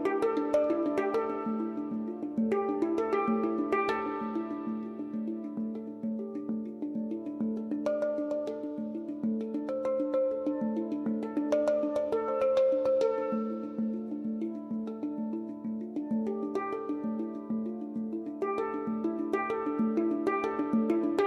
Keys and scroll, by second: 6.3-8.1 typing, 6.5 Return, 13.1-14.0 typing.